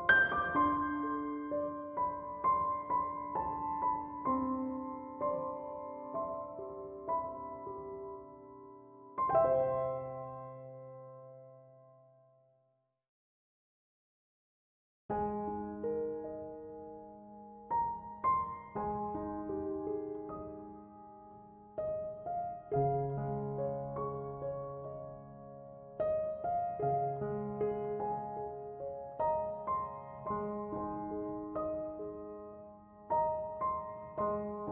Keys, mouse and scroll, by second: 0.8 3, 1.1 6, 1.6 Return, 6.8 Return, 26.2 1, 26.4 0, 28.5 Left, 29.5 -, 29.9 Return.